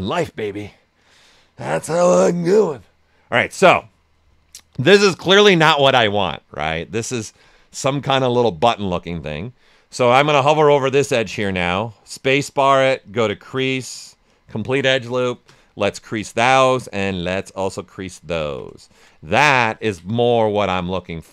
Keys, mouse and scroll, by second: 1.5-6.7 right drag, 6.7 shift+f, 11.5 space, 14.2 click, 14.6 space, 16.2 click, 18.3 ctrl+right click, 18.8 shift+f, 19.2 right click, 19.5 alt+right click.